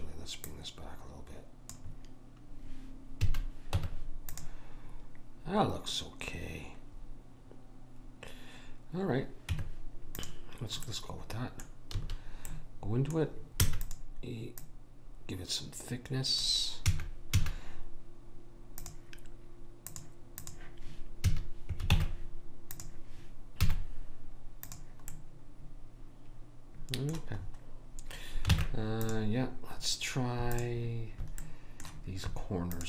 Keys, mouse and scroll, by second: 0.4 click, 3.2 a, 3.7 Tab, 9.5 Tab, 11.1 middle click, 12.0 a, 13.6 e, 14.6 click, 16.8 a, 17.3 a, 20.5 click, 21.3 a, 21.9 ctrl+Tab, 23.6 z, 25.1 middle click, 28.5 ctrl+Tab, 30.5-31.8 drag, 31.4 right click.